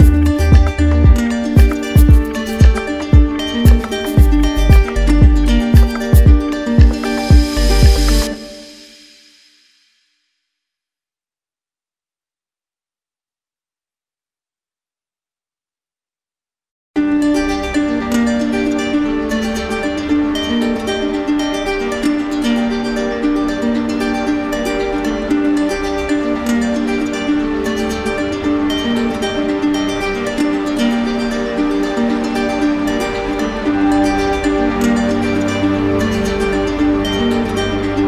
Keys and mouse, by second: 1.7 click, 3.5 click, 7.2 alt+click, 9.2-10.4 alt+drag, 10.5-12.4 right drag, 12.4 ctrl+click, 12.9 ctrl+z, 18.3 click, 20.7 alt+right click, 22.5 ctrl+click, 24.3 alt+right click, 26.2 click, 27.8 right click, 29.1 right click, 29.4 ctrl+click, 34.1 w.